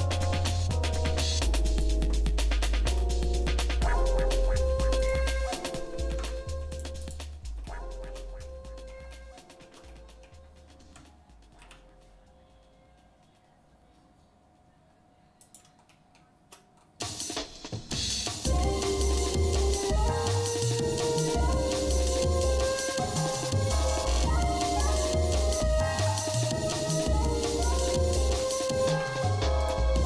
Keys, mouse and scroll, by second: 2.2 shift+middle click, 3.2 scroll down 1, 3.6 shift+middle click, 4.2 scroll up 1, 5.0 click, 5.5 shift+middle click, 6.1 ctrl+Tab, 7.0 click, 7.7 shift+middle click, 8.4 middle click, 9.1 shift+middle click, 9.9 middle click, 11.6 i, 15.9 shift+middle click, 16.8 scroll up 1, 18.0 scroll down 1, 18.5 e, 28.4 ctrl+z, 28.9 ctrl+Tab.